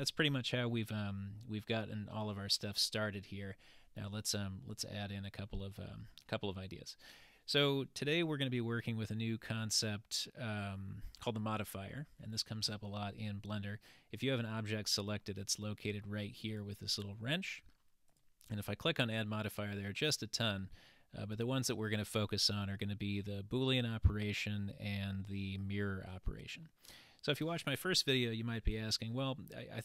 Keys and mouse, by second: 16.5 click, 18.1-19.6 drag, 20.4-26.7 drag.